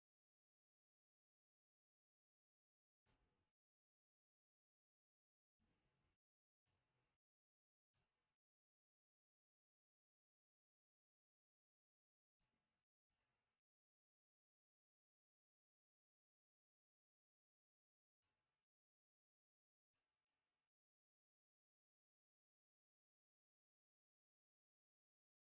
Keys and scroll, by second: 15.3 ctrl+z.